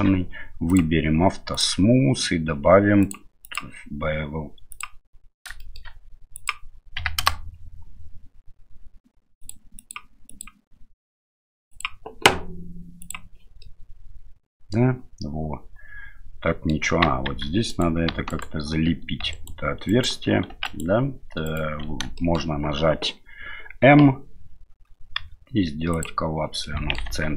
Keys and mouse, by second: 1.5 click, 3.0 click, 3.5-4.8 drag, 5.6 shift+middle drag, 6.4-7.8 drag, 9.4 click, 9.8 click, 10.3 click, 11.8 click, 13.0 click, 13.6-16.7 middle drag, 17.3 Tab, 17.7 right click, 18.3 alt+right click, 19.3 alt+right click, 19.9 alt+right click, 20.5 2, 20.7 alt+right click, 21.4 alt+right click, 22.2 shift+middle click, 25.2 m, 26.7 middle click, 27.1 Tab.